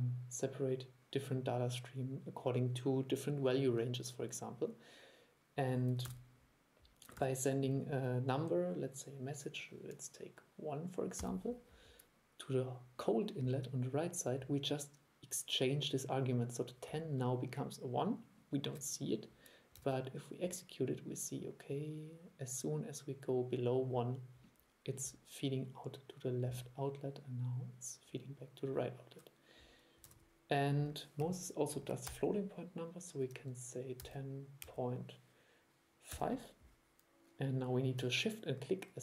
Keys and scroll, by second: 6.1 super+e, 7.3 super+2, 19.9 super+e, 30.1 super+e.